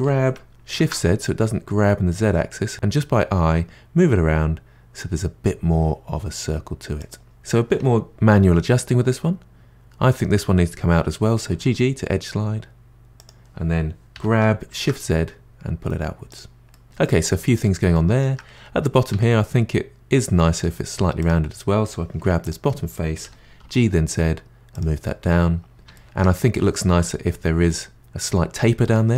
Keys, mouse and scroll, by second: 7.2 click, 11.5 g, 14.1 g, 16.7-18.4 middle drag, 18.4-19.1 scroll up 2, 19.1 Tab, 20.2-21.2 middle drag, 21.2 click, 22.2 3, 22.4 click, 23.2 g, 25.0-28.0 middle drag, 28.9 middle click.